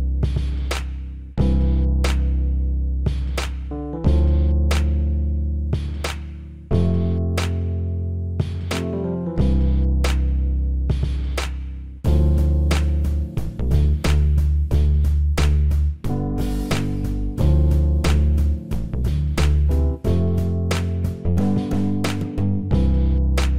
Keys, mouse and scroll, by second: 12.2-13.2 drag.